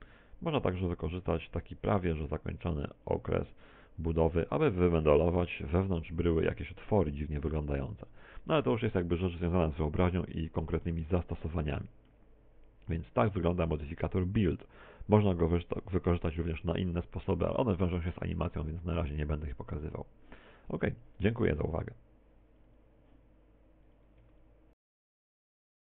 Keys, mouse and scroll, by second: 4.7 middle click, 7.8 F12, 7.8 Escape, 8.3 middle click, 10.5 middle click, 11.8 middle click, 12.5-13.0 scroll down 3, 13.0 middle click, 13.0-13.3 scroll down 1, 14.3 middle click, 14.9 middle click.